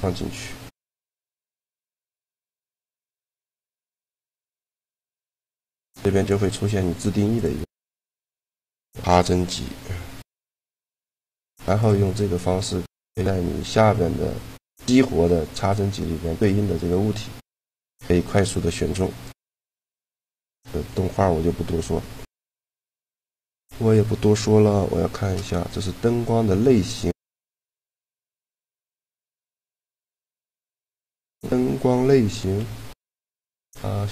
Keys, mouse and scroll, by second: 1.4-3.4 drag, 3.0 d, 5.2-7.0 drag, 7.7 middle click, 10.9 shift+g, 19.0-21.9 right drag, 24.4 shift+g, 28.4-30.4 typing, 31.0-32.6 right drag, 32.2 shift+d.